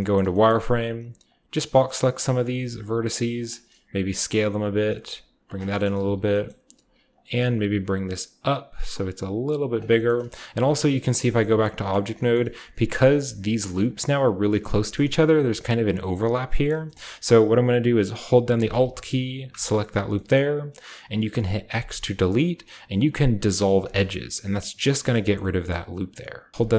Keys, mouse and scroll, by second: 0.4 middle click, 0.6 a, 1.2-2.4 shift+drag, 2.8-4.5 typing, 3.0 middle click, 3.3 middle click, 3.6 scroll up 1, 3.6 click, 4.2-6.8 scroll up 1, 5.4-6.7 drag, 5.9-7.3 typing, 7.1 click, 8.1-8.6 scroll up 1, 8.6-9.6 scroll up 1, 9.6 click, 9.6 scroll up 1, 10.4-13.4 shift+scroll up 1, 10.6-11.3 typing, 11.9 middle drag, 12.5 Tab, 13.4 middle click, 13.4-14.2 scroll up 1, 14.5 Tab, 14.9-15.9 middle drag, 16.7 Tab, 16.7-18.5 middle drag, 16.7-18.5 scroll down 1, 19.4 alt+middle click, 20.2-21.6 middle drag, 21.6 x, 23.7 click, 25.3-26.5 shift+middle drag.